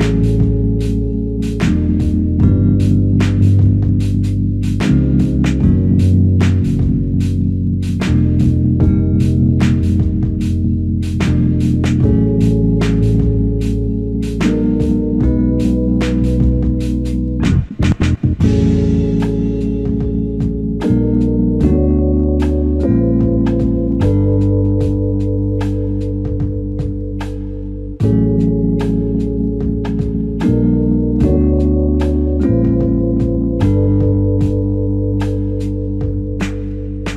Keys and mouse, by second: 3.3 shift+click, 4.3 alt+click, 6.3 double click, 6.7 alt+click, 9.3 double click, 12.2 double click, 12.9 alt+click, 15.8 f, 17.3 alt+click, 21.3 double click, 28.4 double click, 34.0 alt+click, 36.8 f.